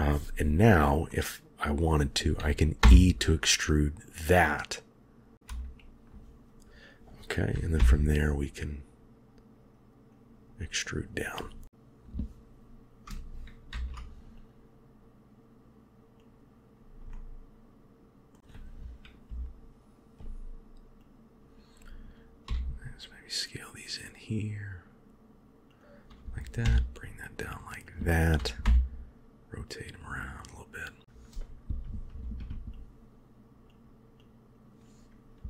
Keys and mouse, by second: 1.0 middle click, 2.7 e, 5.3 KP_1, 7.7 e, 13.6 ctrl+r, 17.0-18.2 middle drag, 19.1 KP_3, 21.0-22.2 drag, 22.3 s, 26.5 g, 28.5 r, 32.1 ctrl+r, 34.1 click.